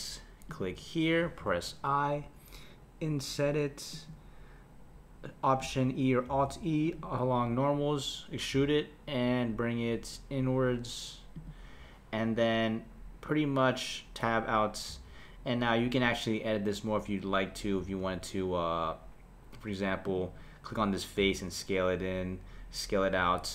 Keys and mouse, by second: 6.3 alt+e, 14.9 Tab, 17.8 Tab, 20.0 click, 21.2 s.